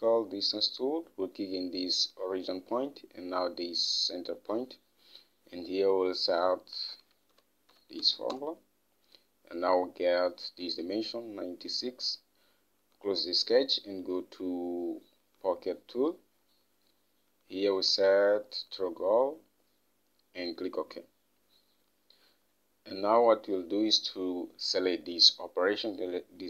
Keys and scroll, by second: 7.0-8.6 typing, 8.8 Return.